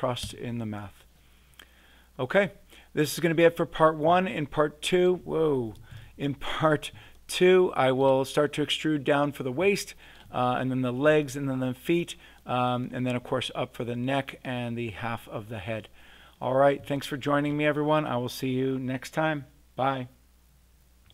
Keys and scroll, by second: 0.2 Return, 5.9 super+z.